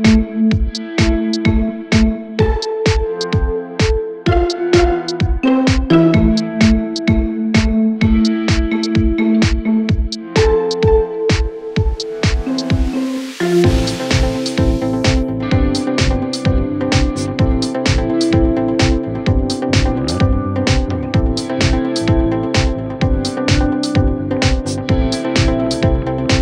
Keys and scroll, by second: 23.1 Caps_Lock, 24.1 b, 24.3 r, 24.5 e, 25.7-26.3 typing.